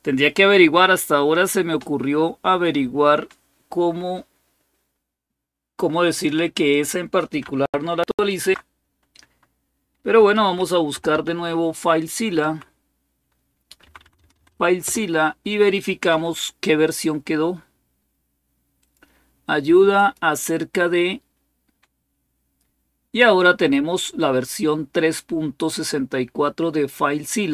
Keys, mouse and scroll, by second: 5.9 click, 6.3 click, 8.0 alt+super+d, 10.1-12.2 typing, 13.6 Down, 13.8 Down, 14.0 Down, 14.1 Down, 14.3 Down, 14.6 Return, 18.6 click, 19.7 click.